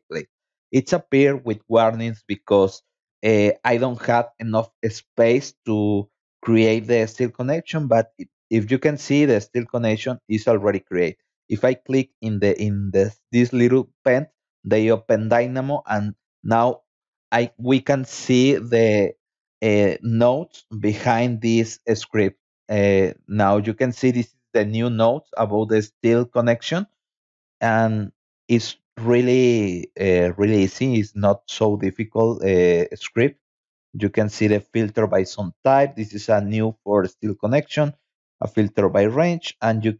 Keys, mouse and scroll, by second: 0.2-0.7 scroll down 4, 1.6 scroll up 2, 3.3 scroll up 2, 3.5 middle click, 3.7 middle click, 4.1-5.1 scroll down 4, 4.3 middle click, 4.5 middle click, 5.9-6.8 scroll up 4, 7.8-8.8 scroll down 6, 10.5 click, 17.6-19.1 scroll down 6, 19.4-20.0 scroll up 2, 20.1 scroll up 2, 21.0 scroll down 2, 24.0 middle click, 30.8 middle click, 34.3 scroll down 2, 34.7 middle click, 36.2 middle click, 37.4-37.7 scroll down 2, 38.0 middle click.